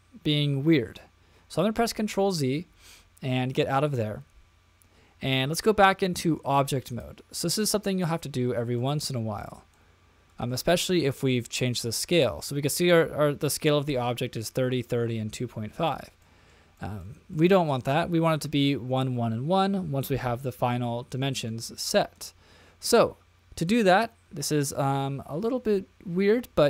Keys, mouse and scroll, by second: 2.0 super+z, 2.7 super+z, 3.8 click, 6.4 click, 7.5 middle click, 8.8-9.4 shift+middle drag, 9.7-10.5 middle drag, 16.2 middle click, 16.8 shift+middle click, 17.3 middle click, 17.9-18.3 shift+middle drag, 21.2 middle click, 21.8 shift+middle click.